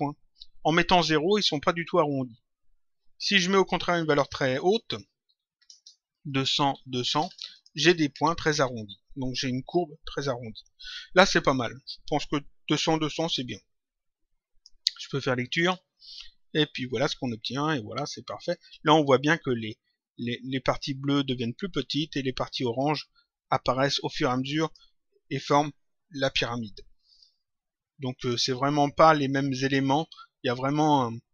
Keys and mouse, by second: 3.4 click, 6.2 click, 7.5 click, 12.0 click, 15.5 click, 18.6 click, 24.5 click, 28.1 click.